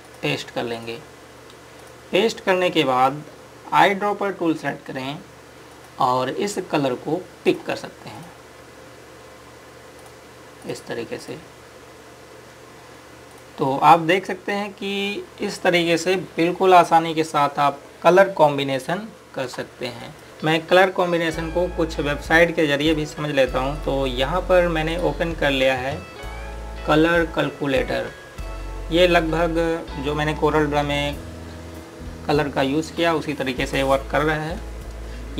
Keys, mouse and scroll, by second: 0.9 click, 1.5 right click, 2.5 click, 4.6 scroll up 1, 6.5 click, 12.4 scroll down 1, 12.7 click, 14.8 scroll down 1, 16.5 scroll up 1, 23.6 click.